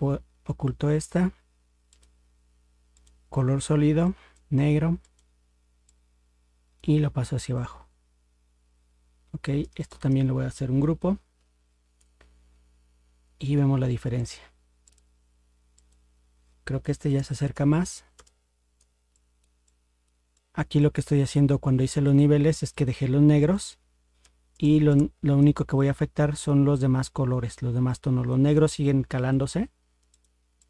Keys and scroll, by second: 11.3 ctrl+g.